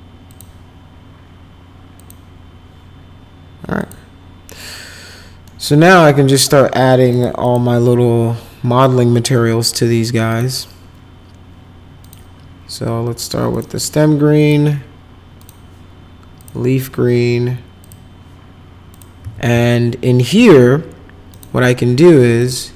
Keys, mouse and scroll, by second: 0.3 click, 2.0 click, 3.7 click, 5.4 middle click, 7.1 click, 7.4 click, 10.3 click, 12.0 click, 13.5 click, 14.4 click, 15.4 click, 16.4 click, 17.8 click, 18.9 click, 19.2 z, 19.6 alt+middle click, 21.3 click, 22.3 click.